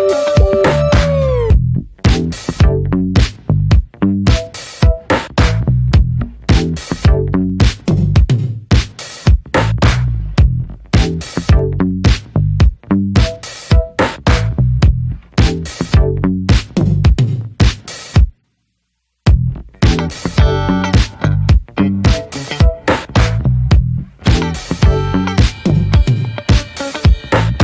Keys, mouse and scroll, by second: 0.7-6.2 drag, 6.2 ctrl+z, 6.4 ctrl+z, 8.0-19.9 drag, 19.9 scroll down 1, 20.0 middle click, 20.5 scroll up 1, 21.4 middle click, 22.5 scroll up 1, 22.7-23.8 shift+middle drag, 23.8 click, 24.3-24.6 scroll up 1, 24.6-25.2 scroll down 1, 25.2 f.